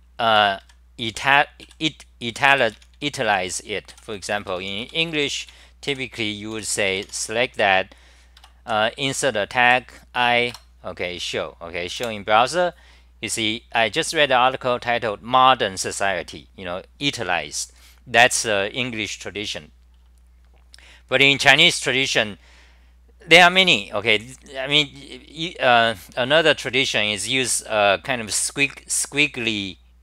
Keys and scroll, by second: 0.4 ctrl+g, 0.6 6, 1.6-7.5 typing, 8.4 Tab, 10.5 Return, 12.0 super+r.